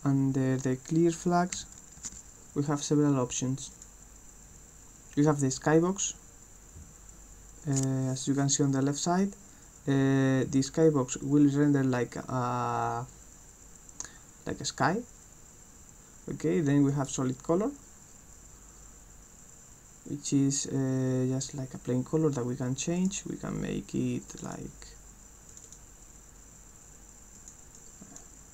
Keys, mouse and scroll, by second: 3.7 click, 16.8 click, 23.0 click, 24.3 click, 25.5 click, 27.4 click, 27.8 click.